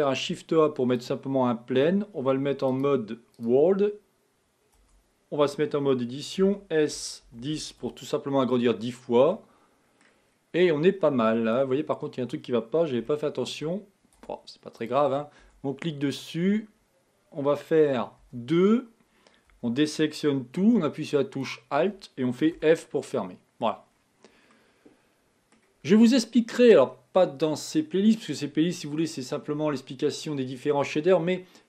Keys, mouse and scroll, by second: 2.7-4.9 drag, 4.9 Tab, 6.8 s, 9.4 middle click, 10.3-11.3 scroll down 2, 11.3 middle click, 11.9-12.5 scroll up 4, 13.1-14.3 shift+middle drag, 14.3 Tab, 14.9 click, 15.5 Tab, 16.3-17.9 scroll up 2, 18.3 2, 19.5 a, 21.5 alt+click, 22.8 f, 23.2 middle click, 24.0-24.5 scroll down 3, 24.6-27.6 middle drag.